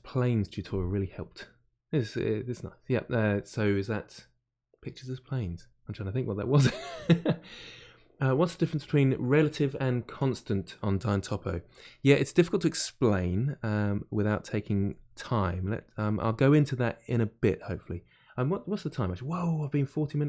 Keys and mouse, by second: 13.1-15.2 drag, 15.2 middle click, 15.8-17.0 drag, 17.0-20.2 middle drag.